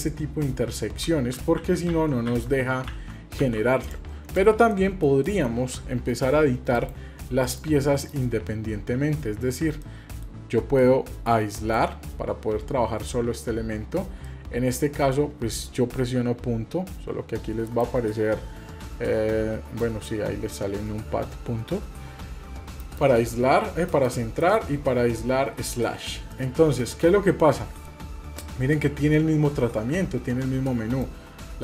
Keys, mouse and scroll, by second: 0.1 middle click, 1.3 ctrl+z, 1.6 ctrl+z, 2.3 ctrl+z, 3.8 click, 4.3 click, 4.7-5.0 middle drag, 5.2-5.6 shift+middle drag, 8.0 KP_Decimal, 8.9 scroll up 2, 9.8-10.2 middle drag, 9.8-10.8 scroll up 7, 10.8 middle click, 11.6 KP_Divide, 12.1-12.4 scroll up 2, 13.1 scroll up 4, 14.2 middle click, 16.1 KP_Decimal, 16.9 scroll up 1, 17.7 KP_Divide, 19.8 KP_Decimal, 21.7-22.2 scroll up 2, 22.5 scroll up 6, 22.8 KP_Decimal, 23.3-23.9 scroll up 2, 23.9 KP_Decimal, 24.4 KP_Divide, 24.9-25.3 scroll up 2, 26.3-27.3 middle drag, 26.3 scroll up 5, 27.5-28.0 shift+middle drag, 31.0-31.6 drag.